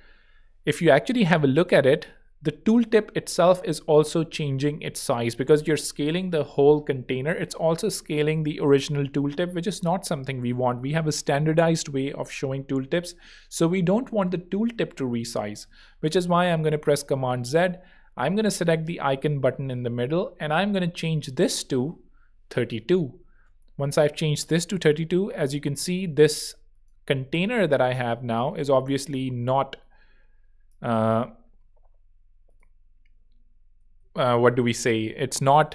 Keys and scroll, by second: 15.4 super+z, 21.4 Escape, 22.0-23.7 typing, 22.7 Tab, 27.2 alt+z, 30.9 alt+shift+super+z, 31.7 shift+super+z, 33.8 super+z.